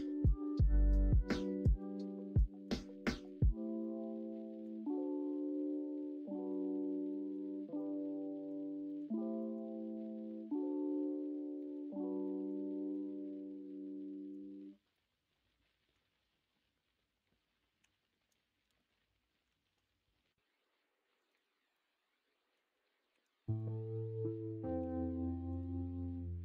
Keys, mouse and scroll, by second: 14.9 middle click, 17.8 l, 18.6 shift+n, 19.6 ctrl+r, 21.7 middle click, 23.1 3, 24.8 2.